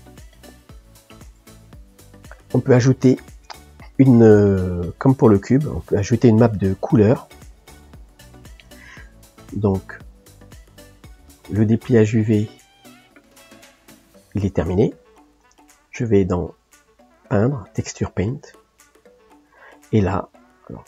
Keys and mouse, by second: 3.1-6.0 middle drag, 7.6 click, 8.3-11.2 middle drag, 11.2-15.0 drag, 15.0-19.3 middle drag, 19.3 click, 20.5-20.8 middle drag.